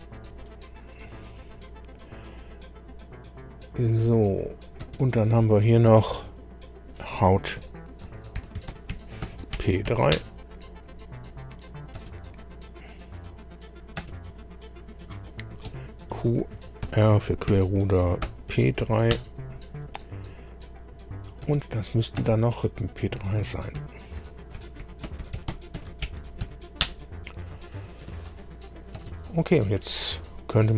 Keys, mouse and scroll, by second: 0.4-1.5 middle drag, 3.6 click, 4.4 click, 4.8 space, 5.3 click, 5.9 space, 7.6 F2, 8.1-10.4 typing, 12.0 space, 12.4 click, 14.0 space, 14.6 click, 15.7 F2, 16.5-18.8 typing, 19.1 Return, 20.3 click, 21.1 click, 21.4 space, 21.8 click, 22.2 space, 23.8 F2, 24.3-26.9 typing, 29.0 space.